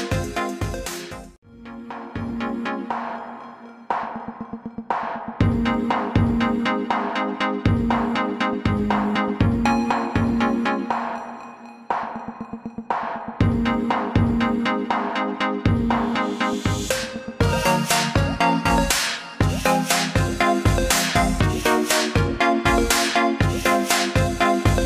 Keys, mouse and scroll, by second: 15.0 click.